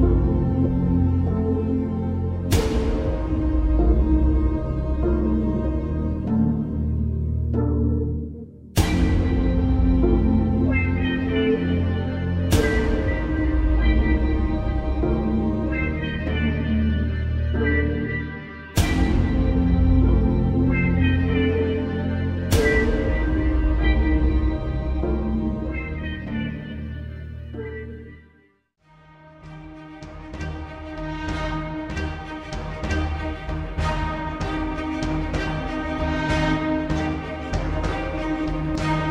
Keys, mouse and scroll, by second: 1.5 click, 3.9-4.4 alt+scroll down 1, 5.0-5.6 shift+click, 6.3-8.2 shift+drag, 8.8 Return, 9.5 click, 9.9 right click, 11.3 click, 11.6 space, 11.8 click, 12.1-12.7 space, 12.7 space, 12.9 click, 14.1-14.4 alt+scroll down 1, 14.7-15.1 alt+scroll up 1, 15.5-16.4 shift+drag, 16.9-18.4 shift+drag, 20.3-21.0 shift+click, 21.5 Return, 22.4-24.6 ctrl+drag, 25.1 space, 25.2 click, 26.6-29.1 ctrl+drag, 30.0 alt+scroll up 1, 30.3 space, 30.4 click, 31.9 Left, 34.7-37.8 drag, 38.3 alt+scroll down 1, 38.6 space, 38.7-39.1 click.